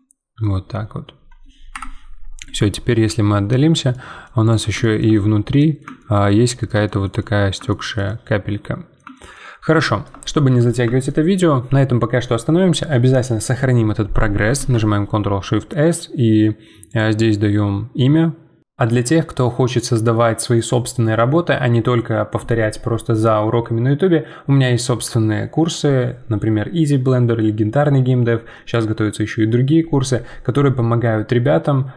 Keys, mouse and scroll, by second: 0.7-1.1 scroll down 11, 1.7 KP_Decimal, 2.2-3.9 scroll down 10, 3.9 middle click, 4.4 click, 4.8-15.7 shift+middle drag.